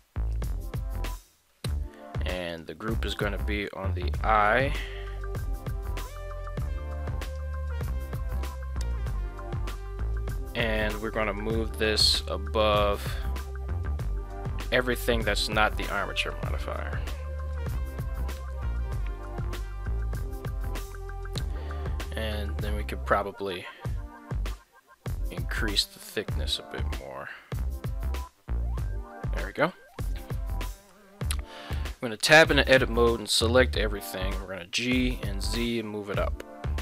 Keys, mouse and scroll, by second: 2.5-7.4 drag, 11.5-14.7 drag, 19.3-21.0 middle drag, 25.4-29.4 shift+drag, 30.7 middle click, 31.7 Tab, 32.3 a, 33.2 KP_1, 34.3 g, 34.8 z.